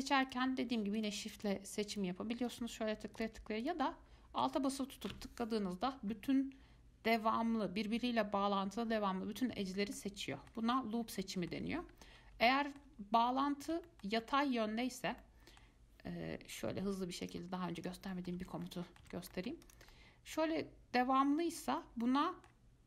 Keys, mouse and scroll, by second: 0.5 click, 1.2 shift+click, 1.6 shift+click, 2.1 shift+click, 2.7 shift+click, 3.4 shift+click, 3.8 click, 4.9 alt+click, 10.1-11.2 middle drag, 11.2 scroll up 3, 11.4-12.1 scroll down 2, 11.4 middle click, 12.1-12.5 scroll up 2, 12.7 alt+middle click, 13.5 scroll down 1, 13.6-17.0 middle drag, 17.0 ctrl+r, 18.3 middle click, 18.6 Tab, 18.8 middle click, 19.2 Tab, 19.5 middle click, 19.8 click, 20.1-22.8 middle drag.